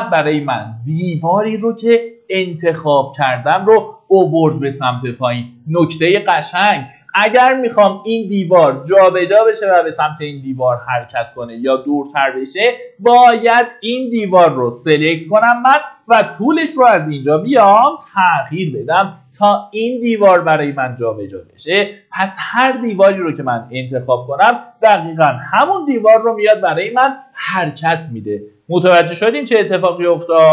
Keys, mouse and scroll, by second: 6.0 click, 17.0 KP_4, 17.2 KP_Decimal, 17.3 KP_5, 21.2 click, 25.2 KP_6, 27.3 click.